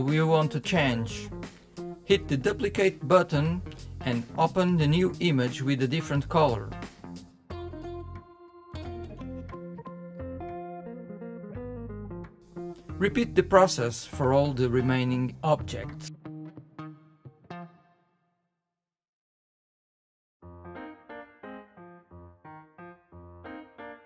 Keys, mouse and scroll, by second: 1.6-4.4 drag, 11.7 click, 15.7 click, 18.2-20.5 drag, 23.2 click.